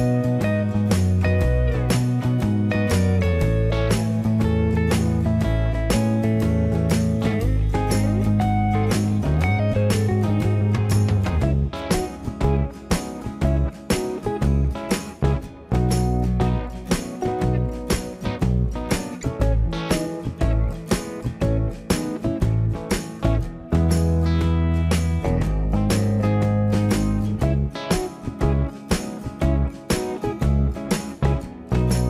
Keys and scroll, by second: 2.5 space, 27.5 space.